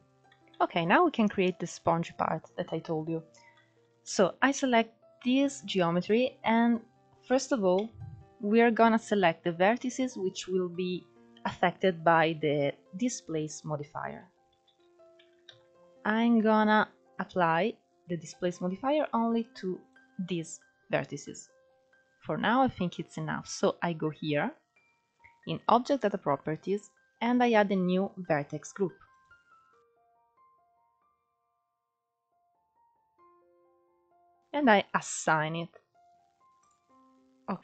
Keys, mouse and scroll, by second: 0.1 KP_1, 0.7-1.2 scroll up 2, 1.2 shift+middle click, 1.4-2.5 scroll up 3, 2.5-3.1 scroll down 1, 3.1 click, 3.5-8.6 shift+middle drag, 8.6 Tab, 9.3-9.7 scroll up 1, 9.7-12.7 shift+middle drag, 15.4 ctrl+1, 15.9-16.4 scroll down 1, 16.4 alt+z, 17.2-18.3 drag, 21.5 scroll up 1, 26.7 click, 30.0-33.3 drag, 33.3 BackSpace, 37.5-37.6 drag.